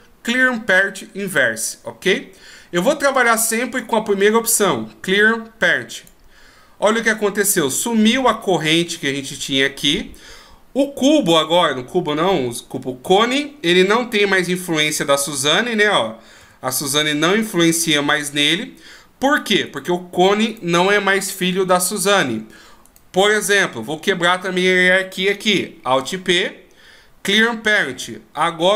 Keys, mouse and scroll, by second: 13.6 g, 16.1 right click, 16.7 g, 20.0 right click, 20.8 right click, 23.2 right click, 26.2 alt+p.